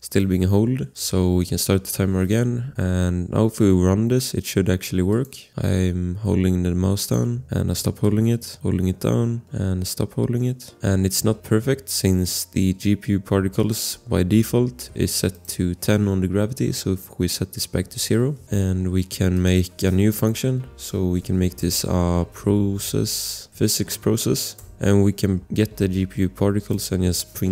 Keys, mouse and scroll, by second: 0.8-1.8 typing, 5.1 click, 17.7 0, 18.0 Return, 18.4 ctrl+s, 19.3 click, 20.0 Return, 20.5-22.8 typing, 23.8 Down, 24.6 Return, 25.9 click.